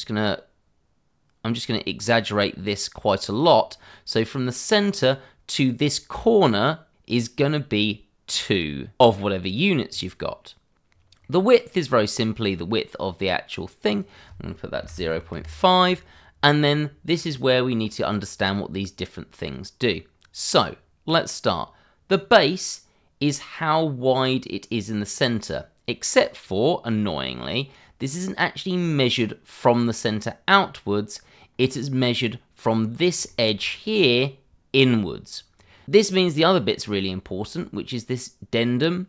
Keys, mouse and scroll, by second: 1.7 click, 3.7 scroll down 1, 10.9 scroll down 1, 11.2 middle click, 12.5 click, 14.7 0, 15.1 5, 15.3 Return, 17.2 click, 20.1-20.8 scroll up 1, 22.1 click, 31.5-32.8 scroll up 1, 33.2 shift+middle click, 33.5 scroll up 1, 35.5 scroll down 1.